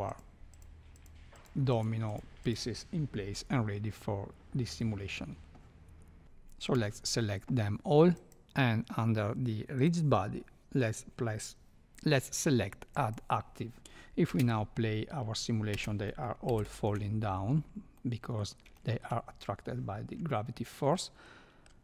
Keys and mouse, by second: 0.9 click, 1.4 click, 1.7 click, 2.1 click, 6.7 Escape, 6.7 a, 8.1-13.1 drag, 14.2 space, 15.7 space, 16.5 shift+Left, 17.9-18.4 middle drag, 18.8 shift+middle click, 20.9 middle click.